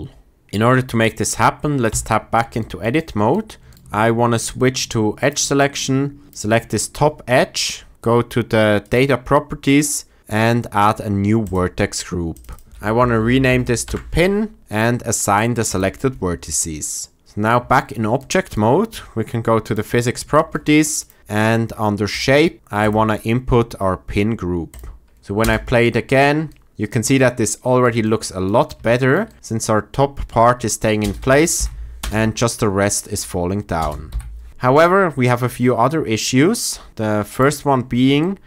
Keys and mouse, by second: 1.8 Tab, 5.1 click, 6.2-11.5 drag, 12.4-13.8 shift+drag, 15.6 click, 17.2 Tab, 22.1 click, 22.8-24.7 drag, 25.3 space, 30.9 space, 31.5 shift+Left, 31.9 space, 33.7 space, 34.0 Left.